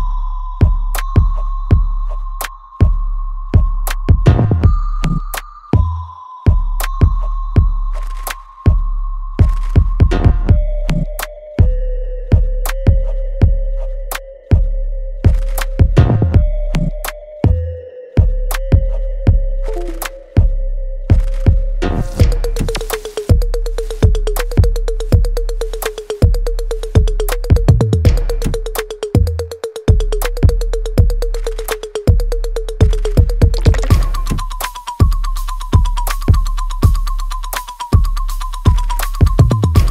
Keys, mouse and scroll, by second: 2.5-14.7 ctrl+drag, 14.7 alt+middle click, 16.5 click, 18.1 right click, 18.5 alt+click, 19.1 alt+right click, 19.9-25.2 drag, 26.9 right click, 27.4 alt+middle click, 27.9 alt+right click, 29.0 click, 29.6 alt+right click, 30.6-32.7 ctrl+drag, 35.9 click, 36.5 ctrl+right click, 37.8 ctrl+z, 38.7 click, 39.4 ctrl+right click.